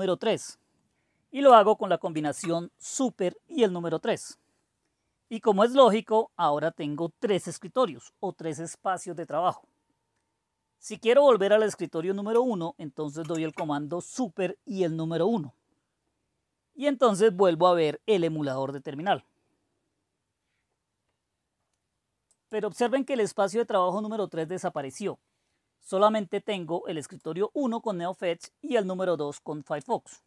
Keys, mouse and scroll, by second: 2.0 super+3, 13.1 super+1, 22.3 click, 27.0 click.